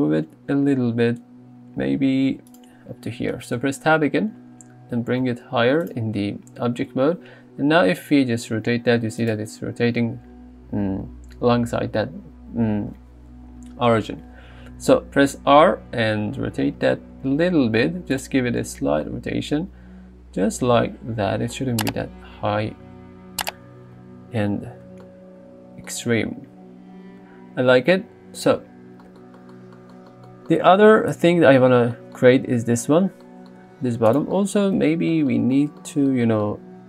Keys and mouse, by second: 3.6 Tab, 5.0 g, 5.3 z, 7.6 r, 15.5 r, 18.2-18.6 drag, 19.1 middle drag, 24.0 KP_3.